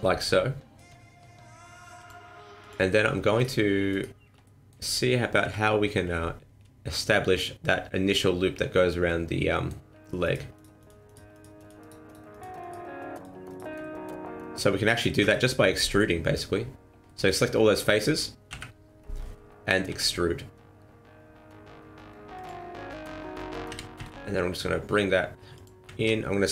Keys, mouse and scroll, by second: 2.0 click, 2.6 click, 3.3 right click, 3.9 shift+right click, 4.4 middle click, 5.4 KP_1, 6.5 scroll up 3, 9.0 middle click, 10.2 shift+right click, 10.5 shift+right click, 10.8 shift+right click, 11.0 shift+right click, 11.3 shift+right click, 11.5 shift+right click, 11.8 shift+right click, 12.0 shift+right click, 12.3 shift+right click, 12.6 shift+right click, 13.1 shift+right click, 13.5 shift+right click, 13.8 middle click, 15.2 KP_1, 17.0 middle click, 17.8 middle click, 18.4 KP_1, 19.8 e, 21.4 n, 23.6 s, 25.9 ctrl+z.